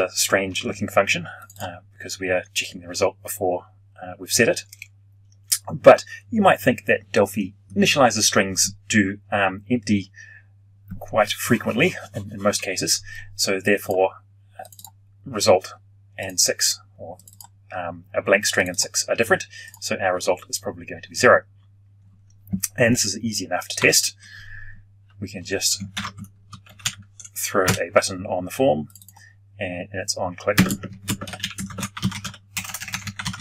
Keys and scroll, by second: 23.7 F12, 25.9 ctrl+alt+p.